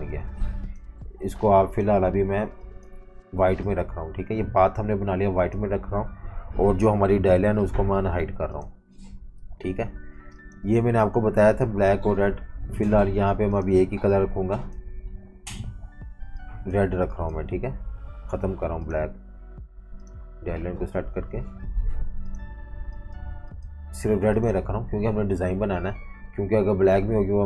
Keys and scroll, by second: 8.0 alt+super+3, 10.2 v, 10.3 space, 18.7 v, 24.1 v.